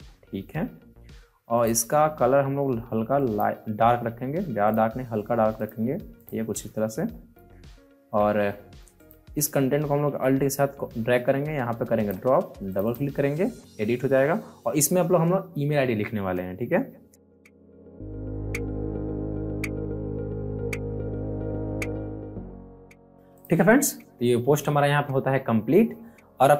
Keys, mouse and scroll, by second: 6.8 alt+scroll up 1, 8.9 ctrl+click, 10.2-12.6 ctrl+drag, 16.9-18.9 typing, 19.4 click, 20.7-21.6 typing, 21.5 click, 22.4-22.9 alt+scroll up 2, 22.5 click, 23.0 alt+scroll down 1, 23.3 click, 24.6 alt+scroll up 1, 25.1 alt+scroll down 1, 25.6 alt+scroll up 1, 26.0 alt+scroll down 1.